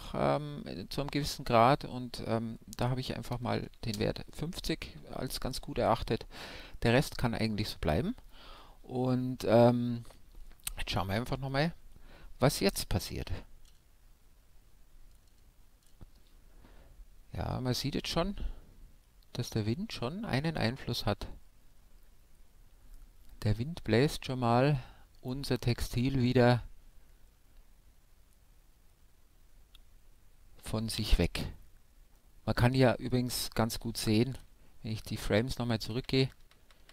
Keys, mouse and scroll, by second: 1.4-3.3 drag, 10.2-13.0 middle drag, 12.5 alt+a, 19.1-20.4 scroll up 1, 20.4-22.2 middle drag, 28.2-31.5 middle drag, 29.2-30.4 scroll down 1, 32.1-33.8 middle drag, 34.0 alt+a, 34.8 Left.